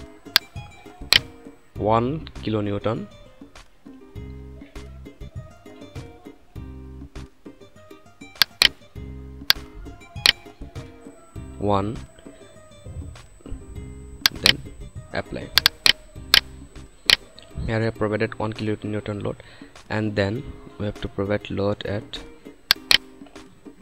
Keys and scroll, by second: 11.2 1.